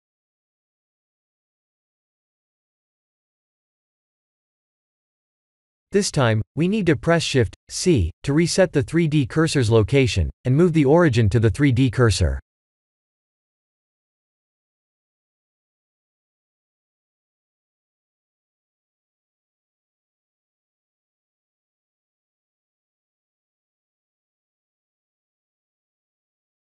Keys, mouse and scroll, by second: 2.7 click, 7.2 click, 11.0 click, 14.7 shift+c, 17.6 click, 24.1 click.